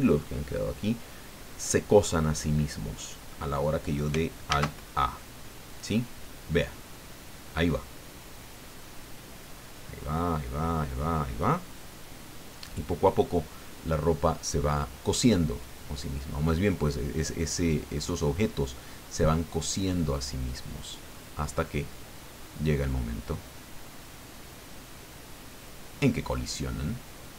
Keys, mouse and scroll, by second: 4.4 alt+a.